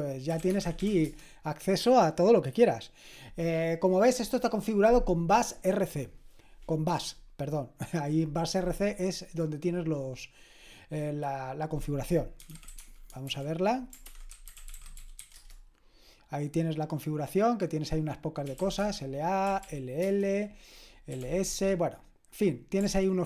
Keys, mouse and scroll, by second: 0.2-1.3 typing, 12.3-15.7 typing, 18.3-21.5 typing.